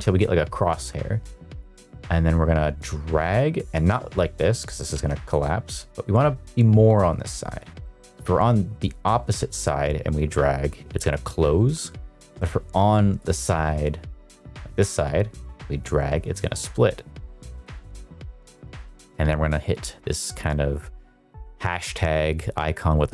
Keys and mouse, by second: 1.5-5.2 drag, 8.1-11.1 drag, 13.2-17.6 drag, 18.6-23.1 drag.